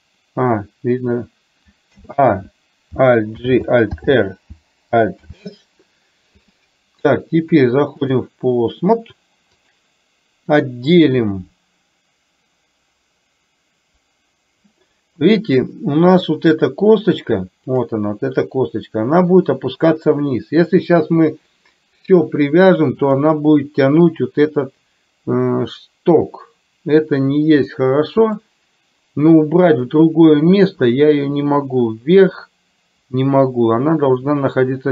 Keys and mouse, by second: 3.5 alt+g, 4.0 alt+r, 5.3 alt+s, 7.5 click, 15.2-16.5 middle drag, 23.2 click, 27.9 middle click.